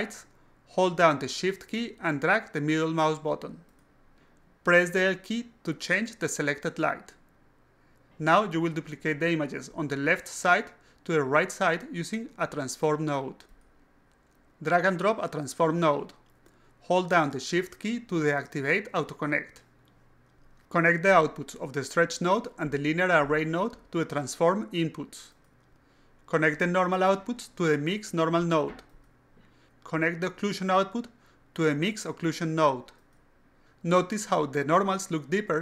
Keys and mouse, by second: 10.2 alt+click, 11.8 click, 12.6 click, 16.9 shift+click, 18.4 click, 19.9-21.1 drag, 21.8 click, 23.1 click, 24.8-25.9 drag, 26.2 click, 26.7 click, 27.0 click, 28.4-29.7 drag, 30.3 click, 31.3 click, 32.7 click.